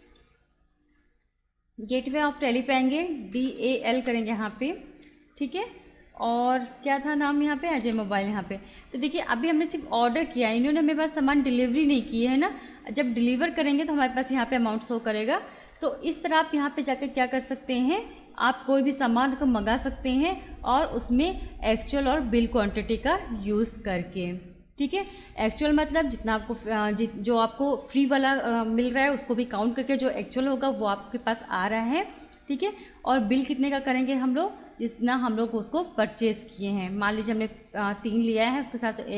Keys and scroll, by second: 0.7 Escape, 3.1-4.1 typing, 7.8 Return, 14.4 Escape.